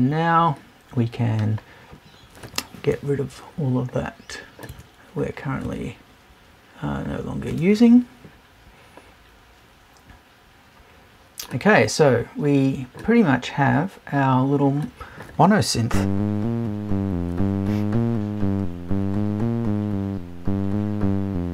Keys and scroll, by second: 2.9 BackSpace, 4.7 BackSpace, 7.5 BackSpace.